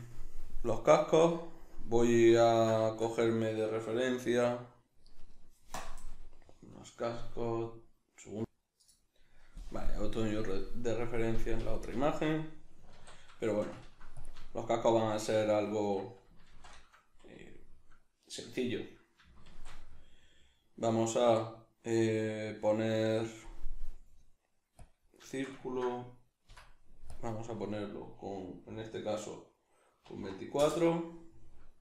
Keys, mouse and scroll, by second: 12.9 alt+q, 14.2 drag, 14.5-31.8 shift+middle drag, 16.4 shift+c, 26.5 F9.